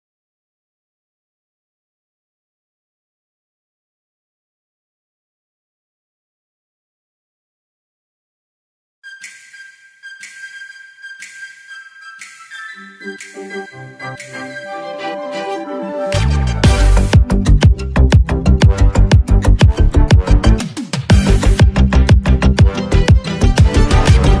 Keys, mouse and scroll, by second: 5.3 click, 7.1 ctrl+click, 8.4 right click, 9.8 click, 10.0 click, 13.4 click, 16.3 click, 19.5 ctrl+d, 20.9 click.